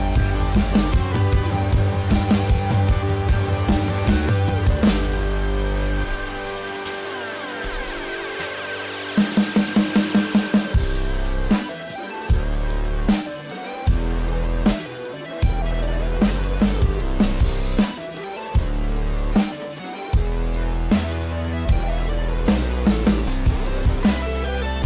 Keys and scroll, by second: 2.7 space, 3.7 ], 7.1 ], 7.9 ], 9.0 ], 13.7 ], 15.8 ].